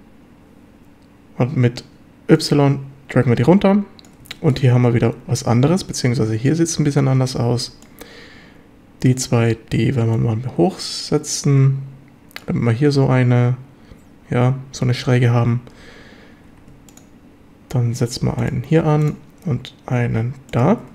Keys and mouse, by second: 2.4-4.1 drag, 4.3 shift+middle drag, 7.2 a, 7.6 b, 10.2-12.4 drag, 14.9 a, 16.5 ctrl+r, 18.4 click, 20.5 click, 20.7 a.